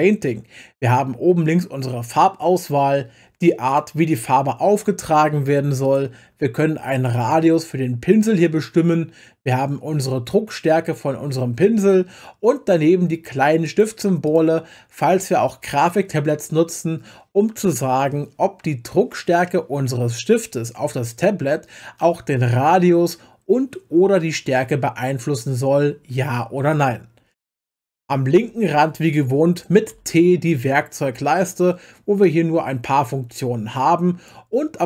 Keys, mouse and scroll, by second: 3.7-6.9 drag, 13.6 click, 14.3 click, 29.9 t, 30.5 t, 32.2 click.